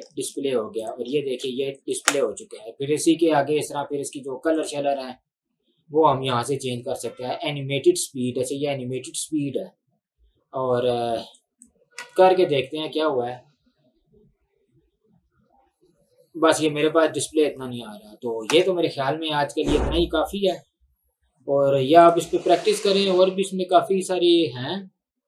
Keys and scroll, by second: 0.2 ctrl+1, 2.5 Escape, 2.6 ctrl+1, 12.1 space, 18.6 space.